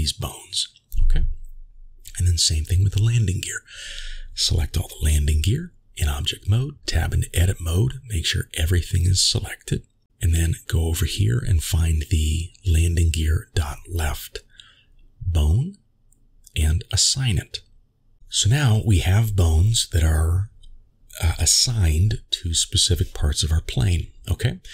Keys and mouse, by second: 0.5 Tab, 4.1-4.5 shift+middle drag, 10.2 a, 13.6 click, 18.0 click, 18.1 middle click, 19.9 Tab, 23.9 click.